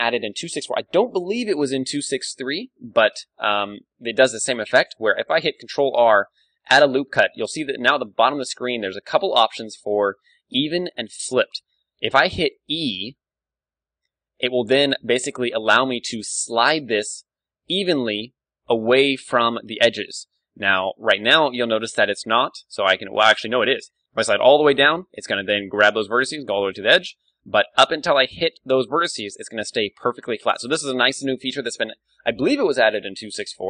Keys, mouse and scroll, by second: 3.5-5.3 middle drag, 5.4 ctrl+r.